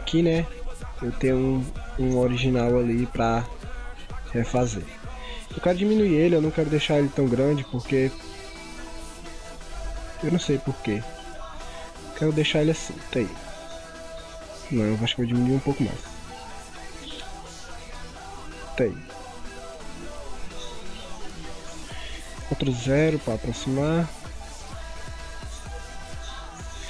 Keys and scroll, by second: 22.4 ctrl+0, 24.1 ctrl+-, 24.5 ctrl+=, 25.0 ctrl+0, 25.6 ctrl+=, 26.2 ctrl+0.